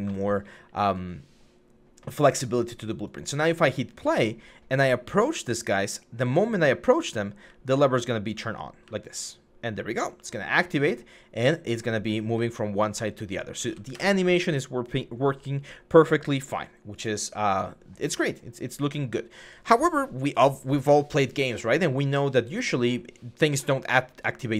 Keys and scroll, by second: 4.8-5.3 typing, 6.6-9.7 typing, 12.1-13.9 typing.